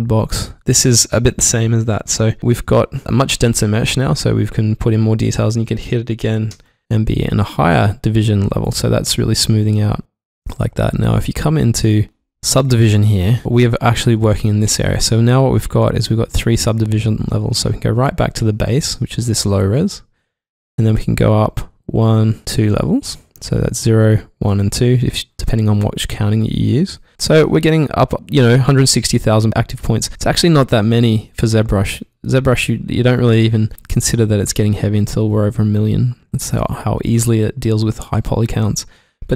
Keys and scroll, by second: 1.6 shift+Num_Lock, 2.0 shift+f, 6.5 ctrl+d.